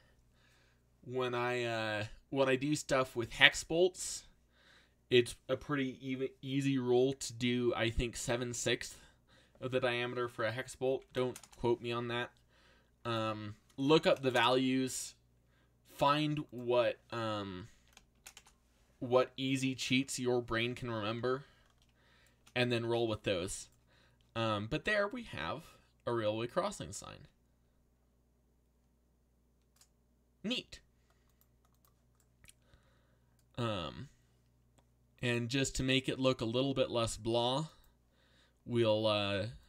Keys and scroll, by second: 10.6-11.8 typing, 14.0 6, 17.2-18.6 typing, 21.1 z, 22.7 a.